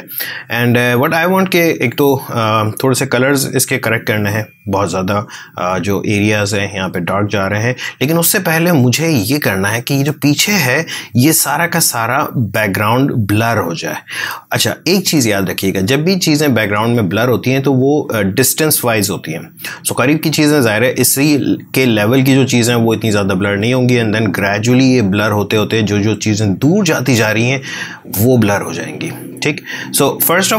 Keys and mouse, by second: 2.8-7.9 ctrl+drag, 8.1-15.8 ctrl+drag, 16.0-19.0 drag, 20.9 click, 27.1 click, 30.0-30.5 drag.